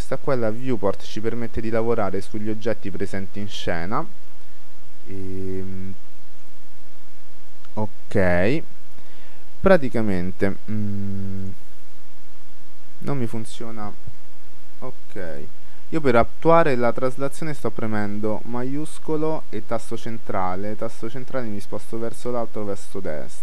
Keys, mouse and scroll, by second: 1.6-4.8 middle drag, 5.8-7.5 middle drag, 7.9-9.1 scroll down 1, 9.1-11.0 middle drag, 11.5-13.2 drag, 14.4-16.0 middle drag, 19.8-21.4 middle drag.